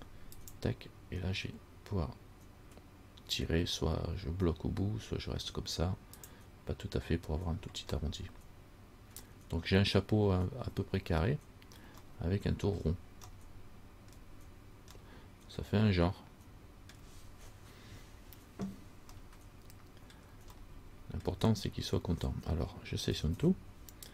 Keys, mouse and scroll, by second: 8.2 middle click, 12.3 middle click, 12.3 scroll up 1, 13.0 scroll down 1, 13.5 middle click, 15.2 middle click, 18.9-19.4 scroll down 2, 19.4 middle click, 20.8 middle click, 23.3 a, 23.5 a.